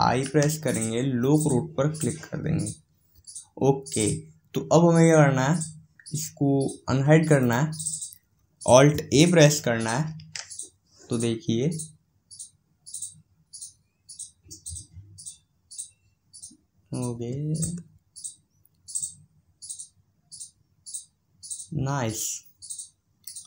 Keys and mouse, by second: 7.6-9.2 drag.